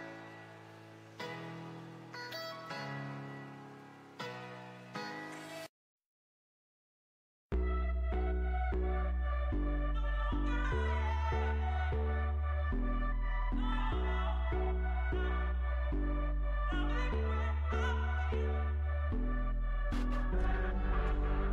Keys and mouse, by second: 9.0 z, 10.4-13.1 right drag, 11.8 s, 17.9-20.0 right drag, 18.6 s.